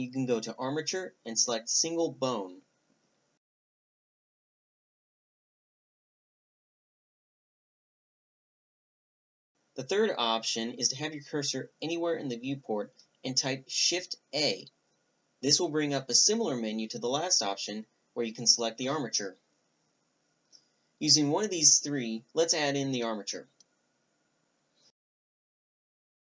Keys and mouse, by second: 0.0 Delete, 9.8 Delete, 11.7 shift+a, 19.2-19.7 drag, 21.5 shift+a.